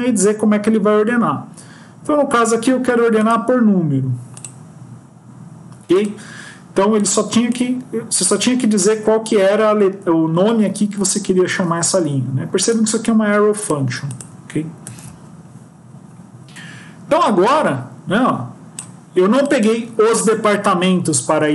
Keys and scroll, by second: 14.8 ctrl+s.